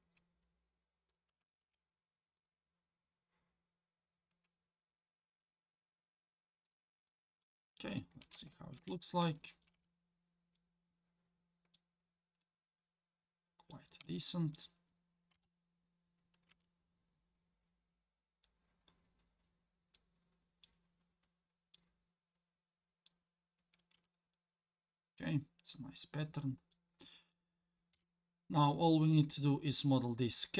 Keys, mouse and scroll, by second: 1.6 ctrl+r, 7.1 middle click, 7.6 scroll down 2, 8.8 alt+z, 9.3 middle click, 9.7 Tab, 10.0 scroll down 2, 10.6-11.7 middle drag, 12.0-12.4 scroll up 2, 12.4-13.7 middle drag, 14.1-14.6 shift+middle drag, 15.3 KP_7, 16.5 Tab, 17.4-18.4 scroll up 4, 19.0 scroll down 2, 19.9 middle click, 21.7-23.1 middle drag, 23.6-24.1 scroll down 3, 23.9 Tab, 24.3-26.7 middle drag, 27.0-27.3 middle drag, 27.9 KP_7, 28.9-30.1 scroll up 3, 30.3 scroll down 2.